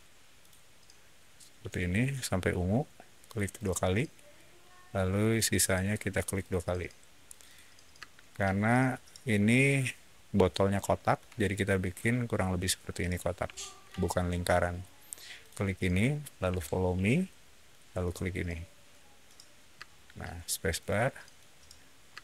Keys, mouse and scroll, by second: 0.3 click, 3.1 click, 3.4 click, 5.0 click, 5.1 click, 6.1 click, 6.3 click, 7.2 click, 7.3 click, 7.6 scroll down 1, 7.9 space, 8.2 click, 8.5 middle click, 9.4 middle click, 10.4-11.0 shift+middle drag, 12.5-13.7 shift+middle drag, 13.9 scroll down 1, 15.3 shift+click, 17.9 click, 18.8-19.1 middle drag, 19.7 space, 20.6 click, 21.1 middle click, 21.4 scroll down 1.